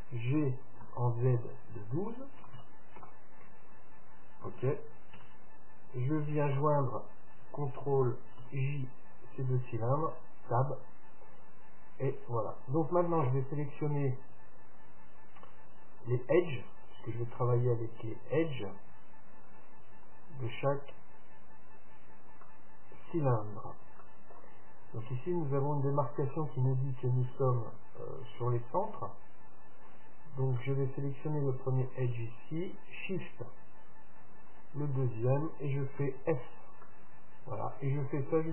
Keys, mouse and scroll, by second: 0.5 g, 5.3 Tab, 6.7-8.7 right drag, 8.6 ctrl+j, 10.2 Tab, 16.9-18.6 drag, 17.5-21.0 middle drag, 20.1 Tab, 20.6 Tab, 22.6-26.0 middle drag, 26.5-28.4 middle drag, 30.1-31.9 right drag, 30.7-32.7 middle drag, 34.7-36.6 right drag, 36.2 f, 37.0-38.5 middle drag.